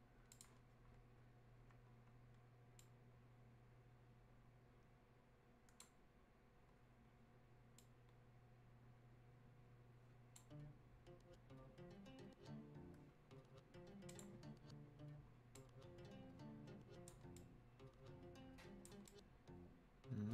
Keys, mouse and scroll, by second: 0.3 click, 2.8-7.8 drag, 7.8-12.9 drag, 14.1-20.3 drag.